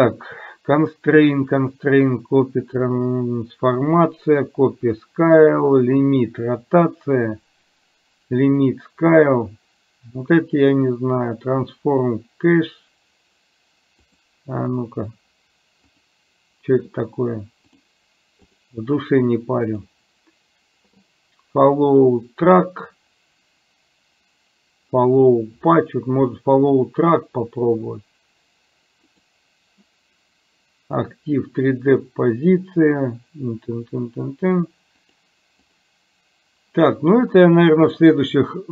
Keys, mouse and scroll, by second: 16.0 click, 18.6 click, 19.8-29.3 drag, 35.3 click.